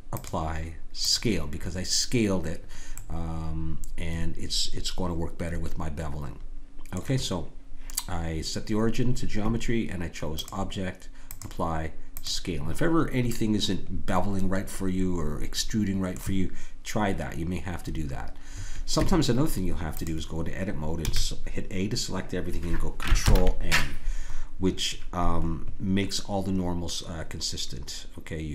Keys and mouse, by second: 2.9-5.5 middle drag, 13.3-15.3 middle drag, 18.9 Tab, 21.0 a, 23.2 ctrl+n.